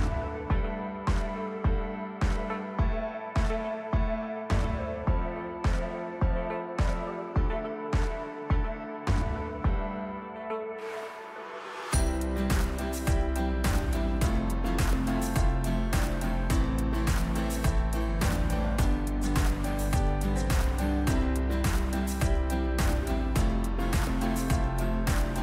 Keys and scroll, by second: 0.2 Delete, 3.5 Tab, 5.0 ctrl+r, 10.2 KP_1, 10.5 shift+z, 12.6 shift+z, 13.3 alt+e, 16.1 ctrl+KP_3, 17.0 KP_Divide, 17.5 ctrl+KP_3, 17.7 ctrl+KP_3, 20.0 alt+s, 22.5 s.